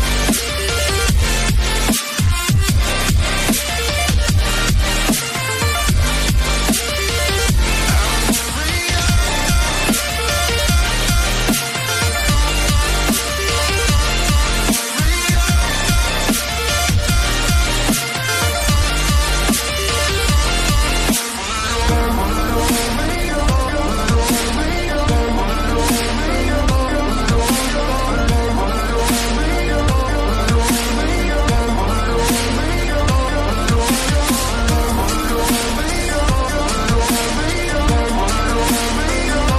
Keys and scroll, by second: 13.1 Delete, 32.3 Delete, 32.3 ], 32.9 [.